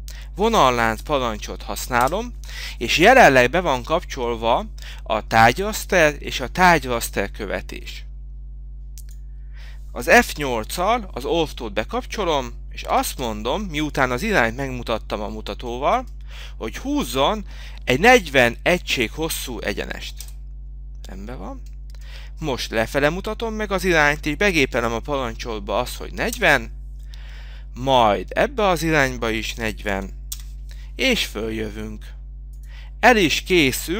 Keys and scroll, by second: 0.0 Return, 29.8 k, 32.9 Return.